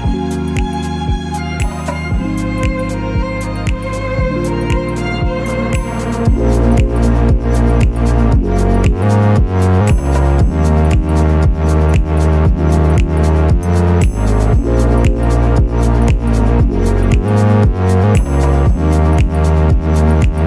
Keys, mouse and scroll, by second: 0.4 g, 0.9 ctrl+a, 1.1 click, 1.1 middle click, 1.3 middle click, 1.3 scroll down 1, 1.8 scroll up 8, 2.2 shift+middle click, 2.3 click, 2.4 Tab, 2.5 middle click, 2.7-3.8 typing, 2.7 click, 2.8 middle click, 2.9 click, 3.5 ctrl+r, 3.6 click, 4.3 Tab, 4.3-4.8 scroll down 7, 4.4 click, 4.6 middle click, 5.1 scroll up 9, 5.3 click, 5.4 ctrl+a, 5.6 shift+middle click, 5.7 click, 5.8 scroll down 2, 5.9 Delete, 6.0 click, 6.1 shift+middle click, 6.4-7.0 scroll up 4, 6.4 middle click, 6.8 Tab, 7.1 ctrl+r, 7.1 shift+middle click, 7.4 middle click, 7.6 ctrl+z, 7.8 click, 7.8-9.7 typing, 8.7 click, 8.8 alt+shift+click, 9.7 click, 10.2 Tab, 10.4 click, 10.4 middle click, 10.4 scroll down 6, 11.2 scroll up 7, 11.4 shift+middle click, 11.5 click, 11.8 ctrl+a, 12.4 click, 13.0 click, 13.1 scroll down 7, 13.4 scroll down 2, 13.4 shift+middle click, 13.5 scroll up 3, 13.6 ctrl+s, 13.7 middle click, 14.0 click, 14.1 middle click, 14.3 shift+middle click, 14.3 scroll up 3, 14.3 middle click, 14.4-15.9 typing, 15.1 alt+middle click, 15.1 alt+middle click, 15.2 scroll up 3, 16.6-17.3 scroll down 5, 16.7 middle click, 16.8 ctrl+a, 17.1 click, 17.1 middle click, 17.3 s, 17.5 s, 18.3 middle click, 18.5 alt+middle click, 18.5 alt+middle click, 18.7 Tab, 18.7 scroll up 3, 18.7-19.6 typing, 18.9 Tab, 19.3 Tab.